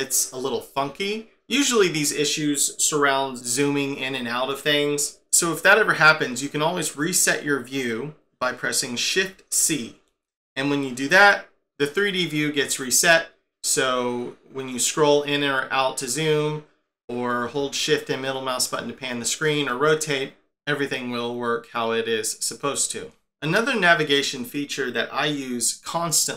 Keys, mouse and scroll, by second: 9.6 shift+c, 12.9 scroll up 5, 13.5-13.8 scroll down 6, 14.9-15.6 scroll up 6, 15.6-15.9 scroll down 4, 17.7 shift+middle click.